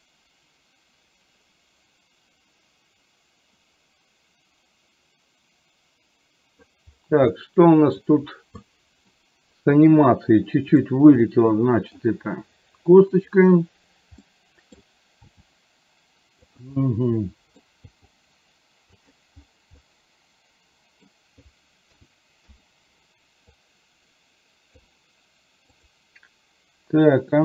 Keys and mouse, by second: 7.5 middle click, 8.7 middle click, 11.5 middle click, 13.2 click, 14.3 middle click, 15.3 g, 16.8 middle click, 18.0 g, 20.0-21.2 middle drag, 22.6 i, 23.7-25.0 drag, 26.0 click.